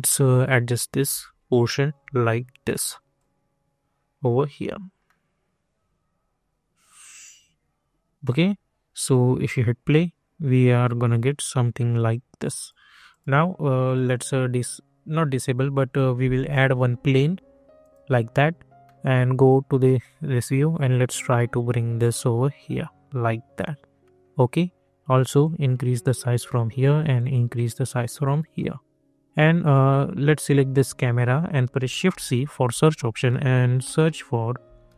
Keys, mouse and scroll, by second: 0.0-1.5 alt+middle drag, 1.5 scroll up 1, 2.2 alt+middle click, 3.1-5.0 alt+drag, 5.0-7.9 alt+middle drag, 9.0 click, 11.9 click, 16.4 click, 18.8 middle click, 20.8-24.0 drag, 24.0 middle click, 25.4-28.4 drag, 28.4 middle click, 30.5 click, 32.1 shift+c, 34.4-34.9 typing.